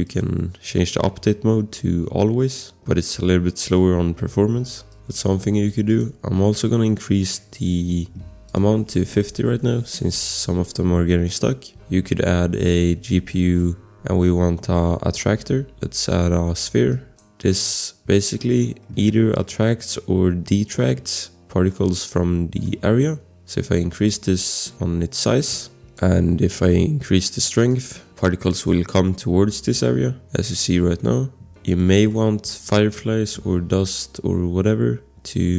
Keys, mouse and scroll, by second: 0.0 click, 3.1 click, 3.2 click, 4.9 click, 5.9 click, 6.9 scroll, 8.9-9.8 typing, 11.8 click, 12.5-13.7 typing, 16.9 click, 17.3 scroll, 18.2 click, 18.4 scroll, 18.6 click, 19.4 click, 19.9 click, 21.7 click, 22.6 click, 22.9 click, 27.7 click, 29.0 click, 30.2 click, 31.2 click, 31.2 scroll, 31.8 click, 32.2 scroll, 32.5 click, 32.8 scroll.